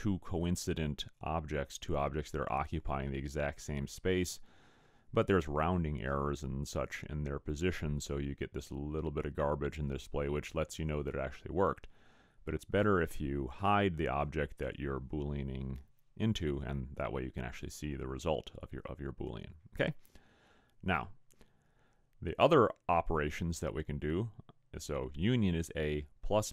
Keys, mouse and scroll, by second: 13.6 click, 25.2 click.